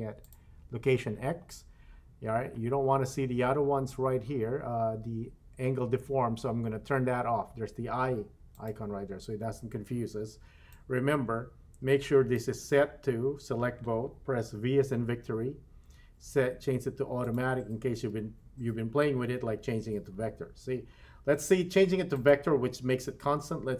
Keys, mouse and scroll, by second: 0.2 click, 1.4-3.2 scroll down 7, 8.5 click, 10.7-12.5 drag, 15.0 v, 17.9 v.